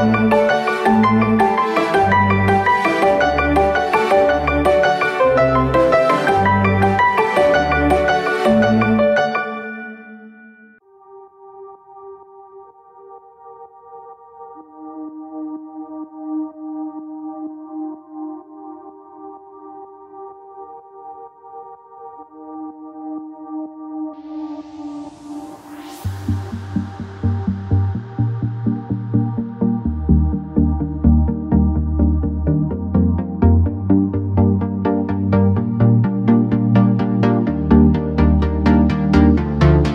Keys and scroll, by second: 2.9 BackSpace, 5.0 m, 11.8 m.